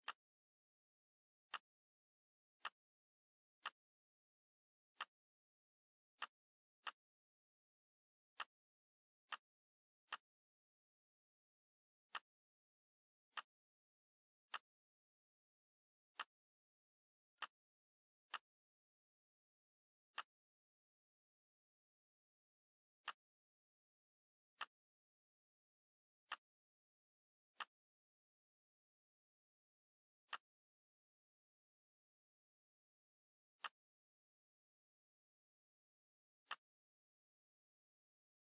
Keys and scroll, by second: 31.2 BackSpace, 31.5 BackSpace, 34.6 BackSpace, 34.8 3, 37.5 Right, 37.8 BackSpace, 38.2 4.